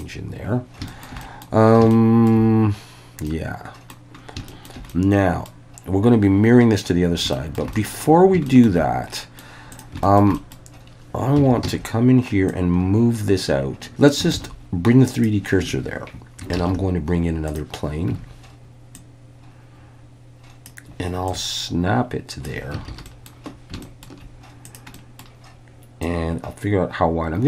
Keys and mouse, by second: 0.0 ctrl+s, 0.0-0.4 drag, 0.9 shift+middle drag, 1.2 middle click, 1.9-2.3 shift+middle drag, 3.3-3.9 middle drag, 4.5 shift+middle click, 4.9-5.5 middle drag, 7.3 shift+middle click, 7.7 middle click, 8.5 shift+middle click, 9.1 middle click, 9.7 click, 10.0 shift+middle click, 10.3 middle click, 11.4 Tab, 11.6 a, 12.5-14.1 drag, 14.4 shift+s, 15.6 Tab, 16.5 shift+a, 18.1 Tab, 18.9-20.7 drag, 21.3-22.5 ctrl+drag, 22.9 alt+a, 23.1 middle click, 23.8 shift+middle click, 24.9 middle click, 26.1-27.4 drag.